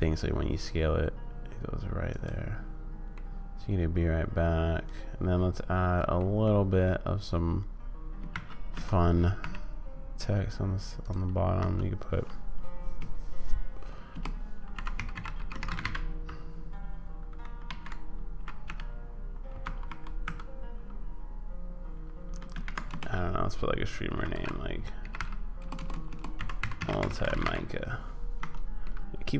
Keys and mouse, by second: 3.3-6.2 middle drag, 6.4 middle click, 8.3 shift+d, 11.6 Tab, 13.0-15.8 typing, 17.4-20.2 typing, 17.6 ctrl+a, 22.5 ctrl+a, 22.8 BackSpace, 24.1-27.4 typing, 28.3 Tab, 28.8 click.